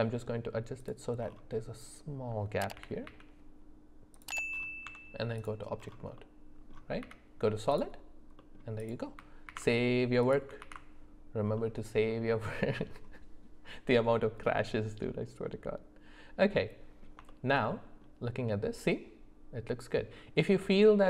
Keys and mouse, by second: 2.7 g, 4.8 Tab, 6.1 middle click, 7.0 z, 8.4 middle click, 8.8 click, 9.4 ctrl+a, 10.6 ctrl+s, 11.5 middle click, 12.3 shift+middle click, 14.5-17.0 middle drag, 17.2 shift+middle click, 17.7 middle click.